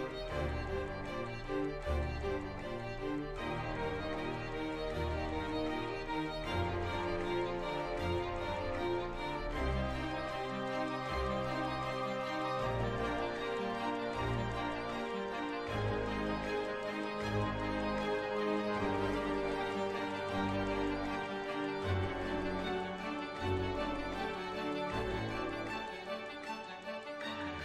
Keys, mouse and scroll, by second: 1.1 middle click, 5.6-9.2 drag, 13.8 click, 14.8-16.0 drag, 16.4 shift+a, 19.3 click.